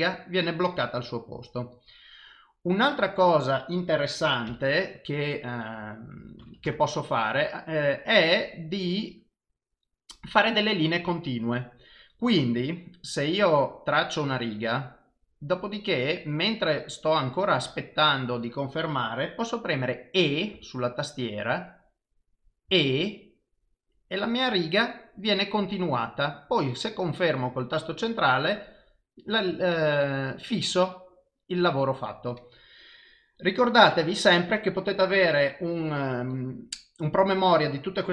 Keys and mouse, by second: 4.5 f, 14.0 click.